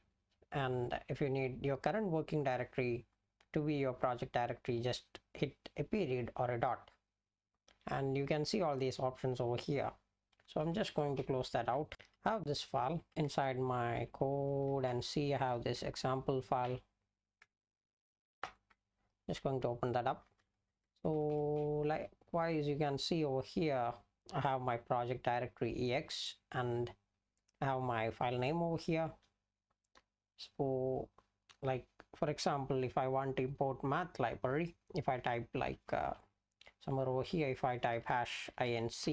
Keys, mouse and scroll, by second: 10.6 Return, 11.0 ctrl+g, 11.9 Return, 36.1 Down, 36.3 Down, 36.6 Down, 37.9-39.1 typing.